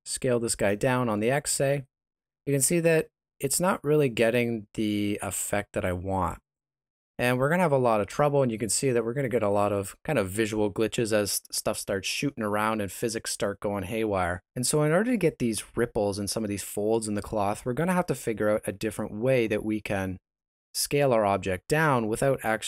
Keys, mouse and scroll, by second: 9.7 Escape.